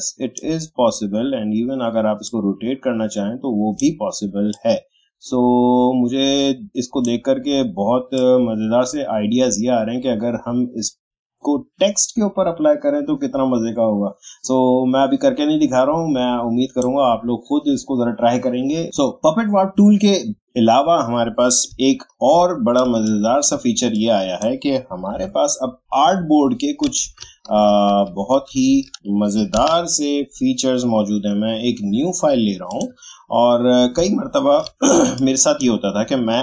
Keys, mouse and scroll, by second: 21.6 alt+click, 21.8-22.3 alt+scroll down 1, 22.8 space, 23.0 click, 23.3 space, 23.9 click, 25.1 Delete, 32.7 click, 34.1 alt+scroll down 1, 34.9 space, 35.2 click, 35.4 space.